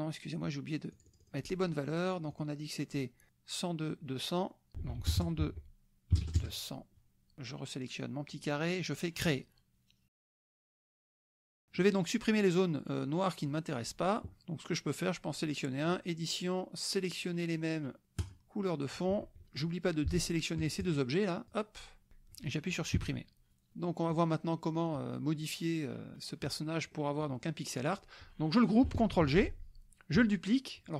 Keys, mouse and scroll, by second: 0.9 click, 2.3 click, 4.7 ctrl+a, 5.0 ctrl+KP_1, 5.1 ctrl+KP_0, 5.4 ctrl+Tab, 6.2 KP_0, 7.4 click, 9.3 click, 11.2 KP_Subtract, 11.7 click, 13.5 click, 15.9 click, 18.2 click, 20.8 shift+click, 21.5 shift+click, 22.9 Delete, 24.1 click, 26.9 click, 29.1 ctrl+g.